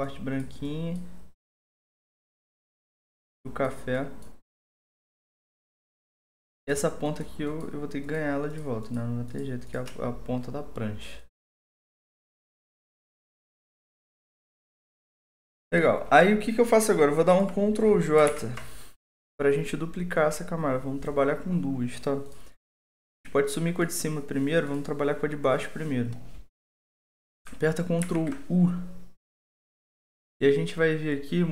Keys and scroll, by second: 18.2 ctrl+j, 28.0 ctrl+u.